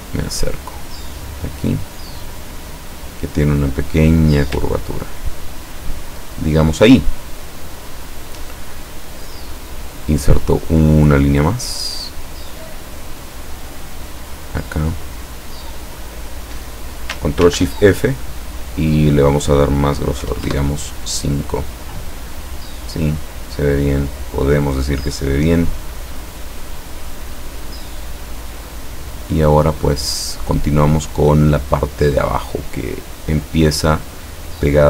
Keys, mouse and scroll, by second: 1.1 click, 1.8-2.8 drag, 4.0 click, 4.9-5.5 ctrl+scroll down 2, 13.8 click, 15.8 click, 17.6 ctrl+shift+f, 19.0 click, 20.3 KP_5, 20.5 KP_Enter, 24.1 click, 26.5-27.0 scroll down 1.